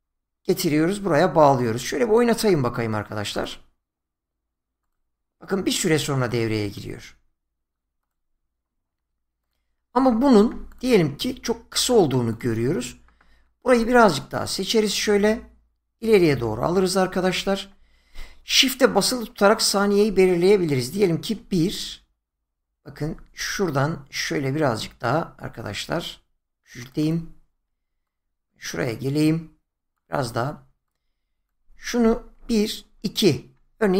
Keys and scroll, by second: 21.4 shift+Right, 32.4 shift+Right.